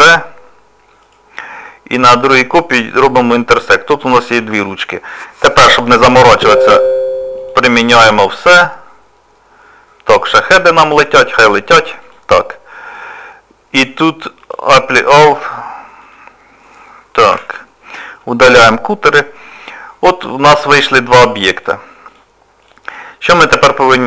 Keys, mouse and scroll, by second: 0.0 shift+d, 2.9 click, 7.4 click, 12.1 click, 14.5 click, 16.0 click, 17.4 Delete, 20.5 right click, 21.1 click, 21.6 click.